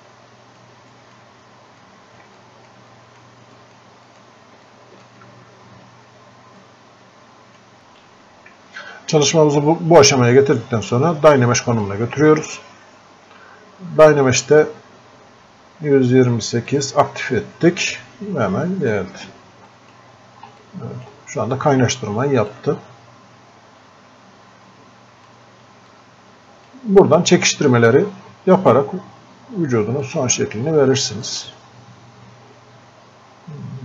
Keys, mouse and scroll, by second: 5.8-6.3 scroll up 1, 6.6-11.9 drag, 11.9-16.7 drag, 19.0-20.7 drag, 20.7-22.5 drag, 22.5-25.9 drag, 25.9-29.0 drag, 30.1 click.